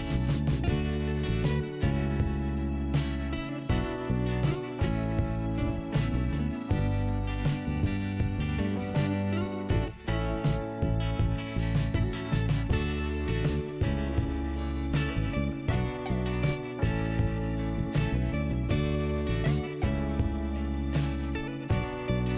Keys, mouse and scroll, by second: 0.4 scroll up 1, 0.6 click, 2.5 click, 5.7 click, 5.8 click, 6.2 click, 7.7 click, 11.9 scroll down 1, 14.3 5, 15.9 scroll up 2, 16.8 click, 17.9 scroll down 1, 19.2 click, 21.7 click.